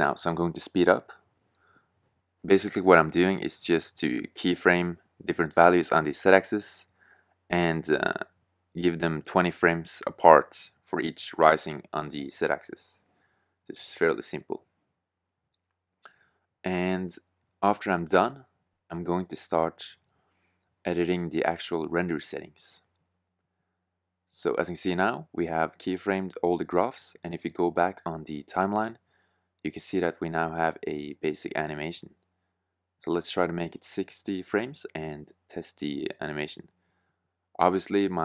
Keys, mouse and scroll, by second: 0.2 i, 0.9 i, 1.0 i, 1.5 KP_0, 2.5 middle click, 2.5-2.9 scroll, 3.8-4.1 scroll, 5.6-6.0 scroll, 6.5 i, 6.6 i, 8.4 i, 9.1 i, 9.2 i, 9.2 i, 9.4 click, 10.3 click, 10.7 i, 11.3 click, 12.0 click, 12.5-13.0 i, 14.8 i, 15.6 i, 15.7 i, 16.1 KP_0, 17.5-18.2 scroll, 18.4-18.8 scroll, 19.2 KP_2, 20.3 i, 21.3 i, 21.3 i, 21.4 i, 22.4 drag, 22.5 i, 22.6 i, 22.7 i, 22.8 i, 28.5-30.6 drag, 30.8-33.3 drag, 34.3-37.1 drag.